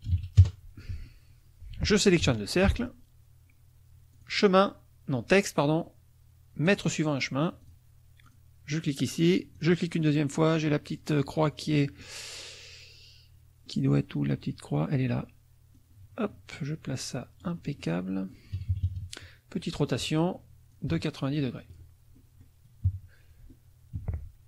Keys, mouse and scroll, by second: 0.1 ctrl+KP_1, 0.4 KP_Enter, 0.9 F1, 2.3 shift+click, 4.1 click, 6.7 click, 7.6 click, 8.3 click, 9.5 click, 11.8 middle click, 13.7 middle click, 15.8-18.1 drag, 18.5 KP_Subtract, 19.7 middle click, 20.7-21.9 ctrl+drag, 22.1 ctrl+click, 22.3 middle click, 22.3 click, 22.9 KP_Subtract, 24.0 t.